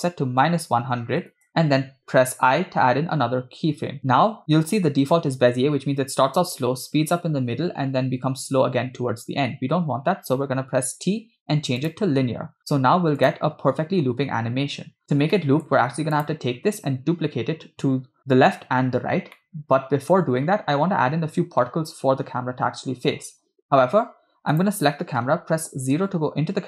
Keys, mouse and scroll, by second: 0.9 0, 2.4 i, 4.7 space, 9.9 space, 10.9 t, 13.4 click, 13.6 space, 15.2 space, 15.3-15.7 middle drag, 16.2 click, 19.5-20.2 middle drag, 20.4-22.3 scroll down 1, 24.7 click, 26.0 KP_0.